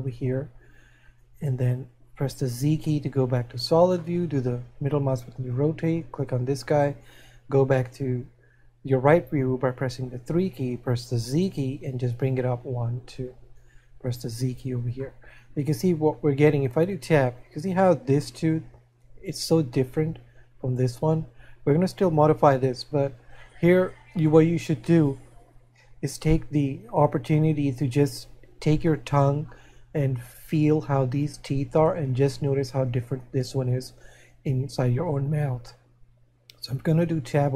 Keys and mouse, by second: 4.6 middle click, 12.3 click, 15.6 middle click, 29.2 middle click.